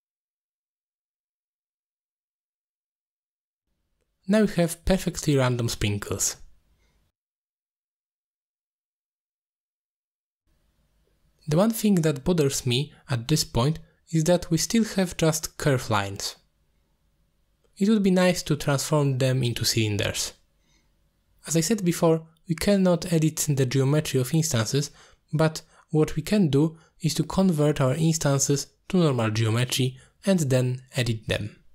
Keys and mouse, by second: 0.2 click, 0.4 click, 0.6 click, 1.1 click, 1.7 click, 2.0 drag, 2.2 middle click, 2.9 click, 3.3 ctrl+z, 3.4 click, 4.1 click, 4.5 click, 4.8 click, 5.1-6.9 shift+drag, 7.6-8.8 shift+drag, 8.9 click, 9.2 ctrl+z, 9.4 shift+click, 9.7 shift+click, 10.2 middle click, 14.0 middle click, 15.4 middle drag, 18.5 ctrl+space, 19.2 middle click, 20.0 middle click, 20.4-20.8 drag, 21.2 g, 22.8 click, 22.9 g, 24.3 drag, 24.6 middle click, 26.2 click, 27.4 click.